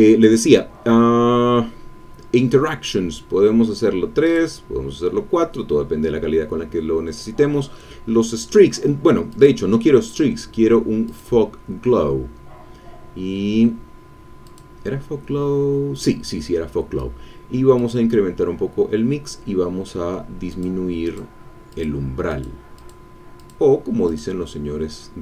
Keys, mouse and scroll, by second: 4.3 click, 9.3 click, 11.0 click, 14.5-16.3 drag, 17.7 click, 20.5 click, 21.1 click, 21.7 click, 22.3 click, 22.7 click, 23.4 click, 24.1 click.